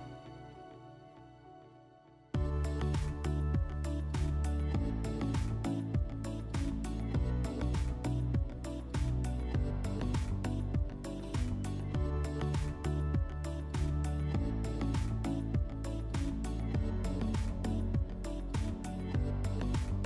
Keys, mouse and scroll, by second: 0.3-1.0 drag, 1.2-2.2 drag, 3.5 click, 4.9 alt+middle click, 7.6 click, 7.8 click, 8.1 s, 9.0 ctrl+click, 9.1 ctrl+click, 10.4 alt+middle click, 11.8 ctrl+click, 11.9 ctrl+click, 12.6 ctrl+click, 15.4 alt+middle click, 18.9 ctrl+click.